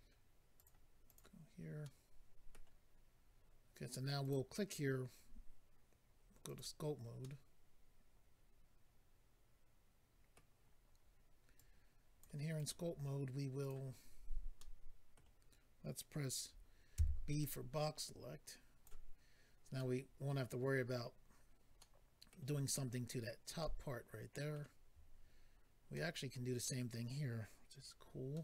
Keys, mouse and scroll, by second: 0.6 click, 1.0 click, 1.8 middle click, 4.2 click, 4.3 click, 6.4 click, 6.5 click, 7.2 middle click, 11.5 click, 12.5 click, 12.6 click, 13.6 click, 13.7 click, 14.5 middle click, 17.4 click, 17.4 b, 19.7 middle click, 21.8 middle click, 23.6 middle click, 24.8-25.5 scroll up 2, 25.5 scroll up 1, 25.9 middle click, 28.3 middle click.